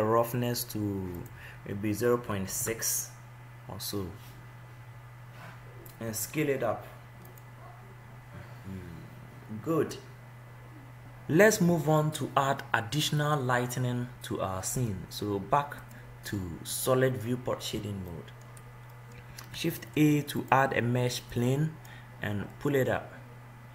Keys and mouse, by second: 1.1 click, 3.2-6.0 drag, 13.5 click, 17.1 middle click, 17.3 middle click, 17.6 middle click, 18.2-21.6 middle drag, 19.8 shift+a, 22.8 middle click.